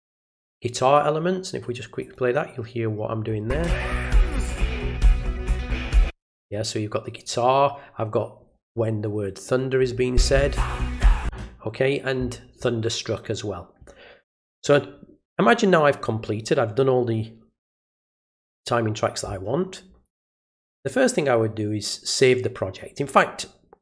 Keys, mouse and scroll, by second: 2.0 click, 9.4 click, 20.8 click.